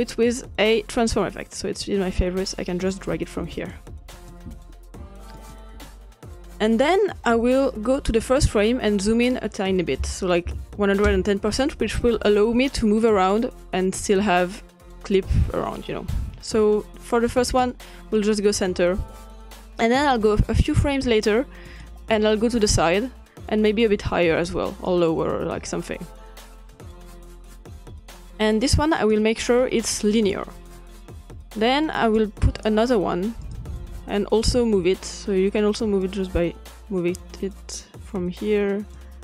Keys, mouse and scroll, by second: 0.1-1.6 drag, 3.0-3.5 drag, 3.7 click, 4.4 ctrl+click, 4.7-5.9 scroll up 2, 9.1 click, 10.0 Delete, 10.5 1, 11.1 Return, 13.0-16.7 drag, 17.5-18.9 drag, 20.0-21.6 drag, 21.9-24.2 drag, 24.9-28.2 drag, 29.0-31.7 drag, 32.0-34.9 drag, 36.0-39.2 drag.